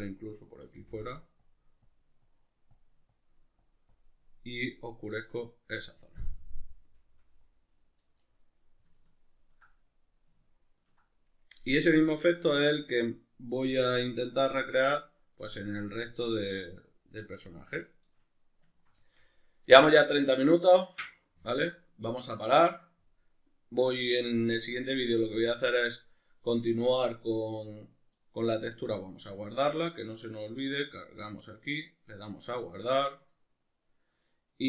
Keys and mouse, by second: 30.5-34.6 drag.